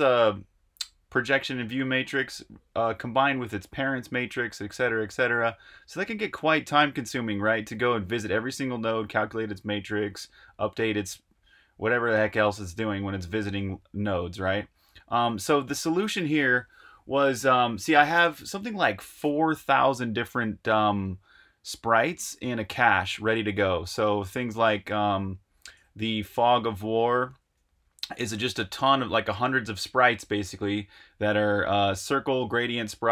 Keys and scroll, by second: 24.7 super+Tab, 26.1 super+r, 26.4-27.5 typing.